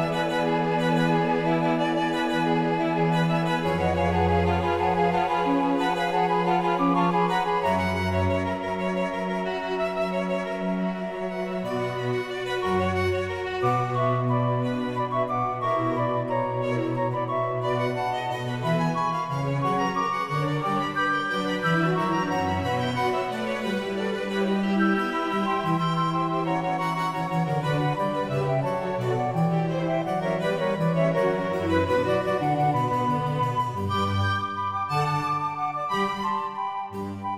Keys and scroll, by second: 34.1 ctrl+u.